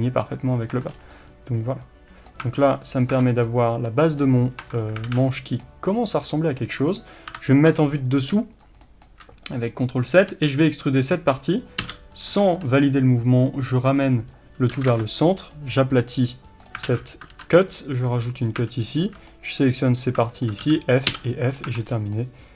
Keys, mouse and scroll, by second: 0.5 click, 0.7 Tab, 0.9 scroll down 1, 1.1-6.3 middle drag, 2.4 Tab, 3.1 Tab, 4.6 Tab, 5.1 alt+a, 6.3 click, 7.3 ctrl+KP_7, 8.0 scroll up 1, 8.6 shift+click, 8.8-11.2 shift+middle drag, 10.3 e, 11.2 right click, 11.8 g, 16.0-18.4 middle drag, 16.9 alt+a, 17.3 ctrl+r, 18.4 click, 19.3-22.5 middle drag, 20.0 scroll up 1, 20.7 f, 21.5-22.1 scroll down 2, 21.7 Tab.